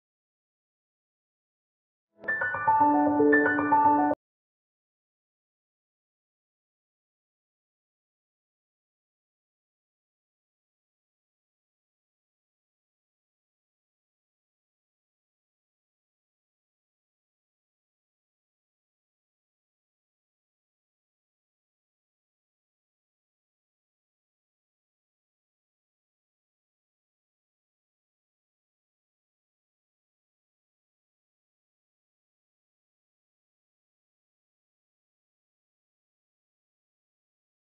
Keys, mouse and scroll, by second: 0.0 click, 0.2 scroll down 1, 0.6 scroll up 1, 1.1 shift+click, 1.4 right click, 1.9 scroll up 1, 3.3 scroll down 1, 3.7-4.1 scroll up 1, 5.9 scroll down 1, 6.0 right click, 6.2-6.9 scroll up 1, 6.9 click, 8.6 click, 9.0 right click, 9.3-9.6 scroll up 1, 9.6-11.8 drag, 12.2 scroll down 1, 12.5 scroll up 1, 12.7 click, 14.3-14.6 scroll down 1, 14.8 click, 15.1 scroll down 1, 15.3 scroll up 1, 16.2 click, 18.1 click, 21.2-22.1 scroll down 1, 23.3-24.3 scroll up 1, 25.0 click, 26.8 click, 27.0 right click, 27.5 click, 29.3 scroll up 1, 30.0-32.2 drag, 32.2 scroll down 1, 32.4 scroll up 1, 32.7-35.4 drag, 35.4 scroll down 1, 35.7 scroll up 1, 36.6-37.7 drag.